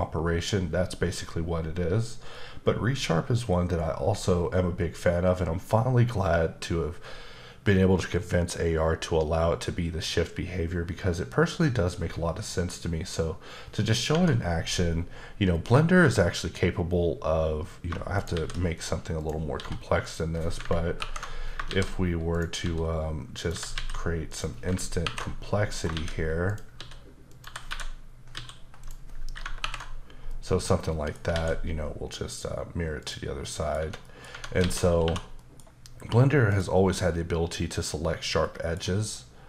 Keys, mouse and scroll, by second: 14.1 Tab, 17.5-17.9 scroll down 1, 18.2 shift+right click, 18.3 shift+a, 19.2 click, 19.5 s, 20.0 click, 21.0 ctrl+alt+KP_Subtract, 21.7-23.7 typing, 22.3 click, 23.4 click, 24.3 click, 25.0 ctrl+alt+KP_Subtract, 25.7 scroll up 1, 25.9-28.3 typing, 26.5 click, 27.3 click, 28.8 click, 29.6 ctrl+alt+KP_Subtract, 30.3 middle click, 31.3 alt+x, 32.3 click, 33.0 click, 33.4 middle click, 33.8 Tab, 34.0 middle click, 34.3 Tab, 35.4 middle click, 36.5 click, 37.7 click, 38.4 middle click.